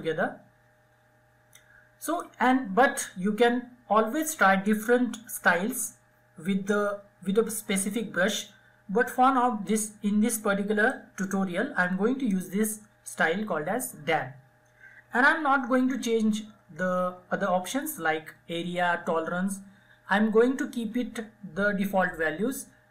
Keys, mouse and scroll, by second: 9.6-13.4 drag, 13.8 ctrl+Num_Lock, 13.8 click, 14.0 ctrl+z, 16.0 ctrl+z.